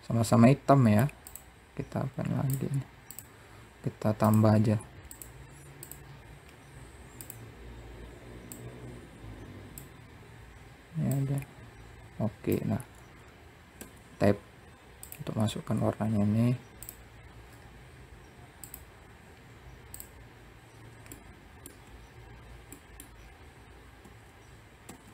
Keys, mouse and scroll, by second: 0.6 click, 2.4 click, 3.6-5.8 drag, 5.8-6.2 scroll down 4, 6.6 click, 10.9 click, 13.1 Tab, 14.4 click, 15.3-16.1 scroll down 4, 16.1 click, 16.8-17.7 scroll up 6, 18.0 click, 18.7-19.3 scroll up 2, 19.3-20.5 drag, 20.5 middle click, 21.2 Tab, 22.1 middle click, 22.5-23.0 scroll down 4, 23.4 Tab, 24.2 a.